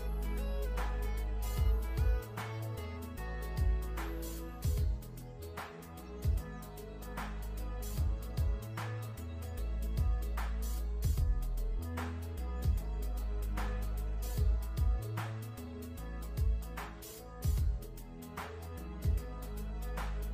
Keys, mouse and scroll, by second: 0.1 click, 2.5 click, 5.0-6.9 alt+shift+scroll down 4, 7.2 click, 8.9 scroll up 1, 9.3 click, 9.7 a, 9.8 click, 11.9 v, 12.0 click, 12.3-12.8 alt+shift+scroll down 2, 12.8 click, 13.1 alt+shift+scroll down 2, 13.4-14.8 scroll up 1, 16.7-17.6 scroll up 1, 18.0 l, 18.9 alt+shift+click, 19.6 v.